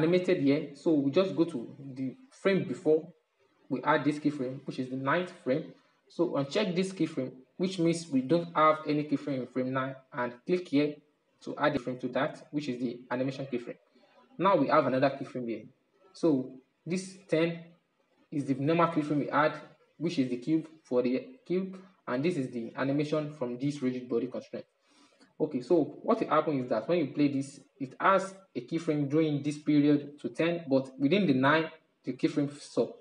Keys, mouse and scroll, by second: 0.2 Left, 5.1 click, 10.8 click, 15.5-18.6 drag, 24.6-25.4 drag, 25.4-28.5 middle drag.